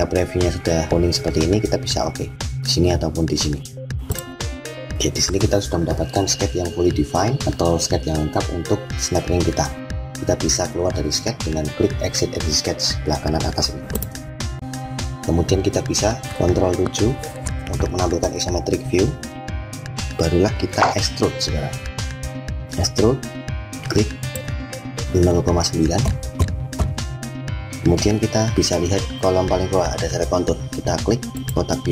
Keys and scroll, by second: 16.2 ctrl+7.